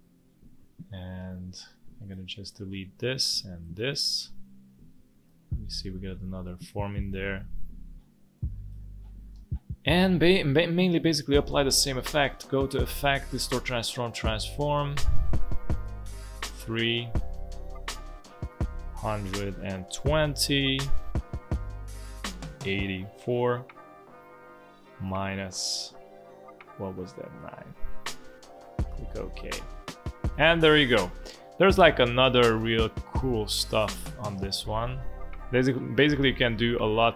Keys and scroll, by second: 1.1 space, 2.9 Delete, 3.7 Delete, 7.0 Delete, 9.3 space, 19.3-20.6 typing, 23.6-24.4 typing, 25.7 -, 27.6 9, 29.9 space, 30.7 space, 32.0 space, 32.6 alt+space, 35.8 space.